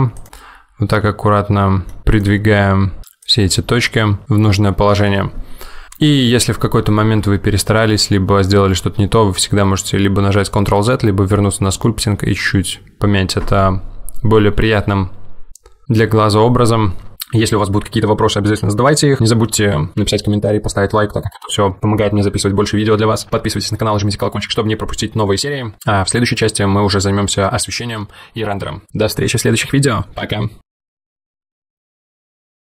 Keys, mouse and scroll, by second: 0.3 middle click, 2.2 click, 2.6 g, 3.6 middle click.